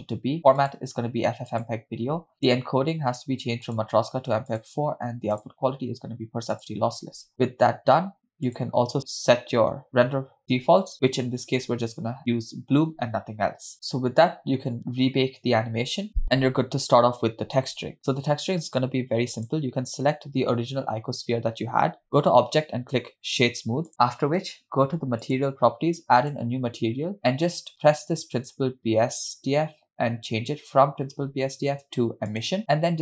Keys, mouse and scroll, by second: 0.7-1.9 drag, 2.1 scroll down 2, 2.5 click, 2.9 scroll down 1, 3.7-4.9 drag, 5.4-6.9 drag, 7.3-7.8 scroll down 1, 8.5 click, 11.6 click, 13.7 scroll up 1, 13.7 space, 16.0 scroll down 2, 17.5 scroll down 1, 19.5 click, 22.2-23.9 drag, 25.3 click, 26.2 click, 28.4-32.6 drag.